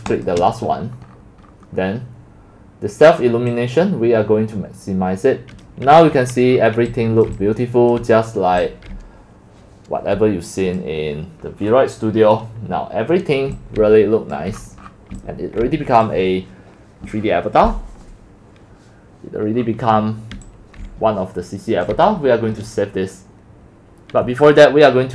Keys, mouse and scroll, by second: 0.3-0.7 shift+drag, 1.8 click, 3.6 click, 4.2 middle click, 4.3 click, 4.4 middle click, 4.5 click, 4.6 middle click, 4.7-6.1 drag, 6.1-7.0 scroll down 12, 7.2-10.3 typing, 7.3 click, 8.1 click, 10.9 click, 11.7-12.1 scroll down 8, 11.9 middle click, 12.2-13.5 scroll up 4, 13.5-15.7 typing, 14.9 middle click, 16.1-17.2 drag, 17.2-17.8 scroll down 8, 17.8 scroll, 18.9 middle click, 19.4-20.3 scroll, 20.4-22.2 typing.